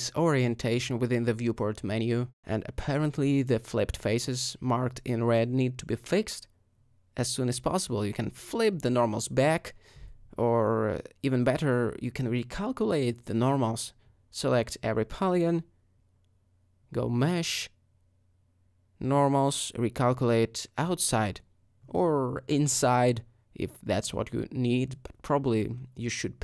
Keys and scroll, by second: 1.1 a, 3.1-3.8 typing, 8.0 Tab, 12.9 Tab, 13.7 a, 22.8 Tab, 25.5 Tab, 26.2 a.